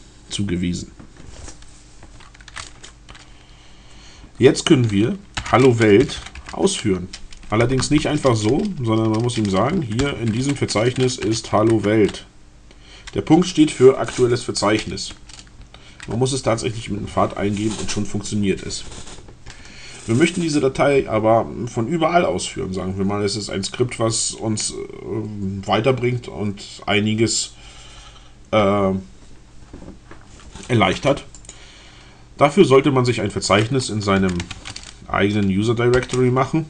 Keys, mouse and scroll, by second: 5.2-7.7 typing, 7.4 Tab, 10.0-11.9 typing, 14.8 Return, 31.4 click, 32.6-33.0 scroll down 2, 34.0-34.9 typing.